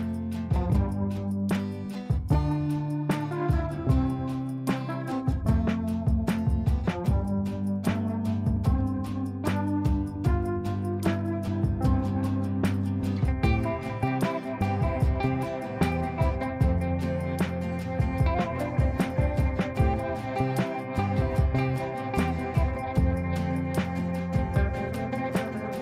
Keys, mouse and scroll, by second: 1.8-2.5 ctrl+click, 2.2 ctrl+right click, 3.7 ctrl+a, 6.6-9.0 typing, 11.4-12.8 typing, 15.5 click, 17.0-18.0 shift+drag, 18.9-19.8 typing, 19.8 click, 20.9-21.2 ctrl+click, 22.3-23.2 shift+drag, 25.0-25.8 shift+drag.